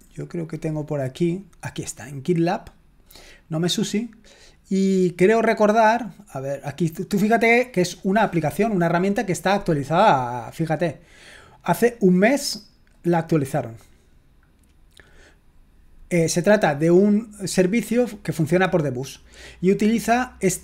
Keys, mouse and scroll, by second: 0.2 typing, 2.6 click, 7.2-8.3 scroll down 2, 8.3-10.3 scroll down 1, 10.3-13.1 middle drag, 13.1-14.0 scroll down 3, 14.4-15.4 scroll down 2, 15.4-20.6 scroll down 1.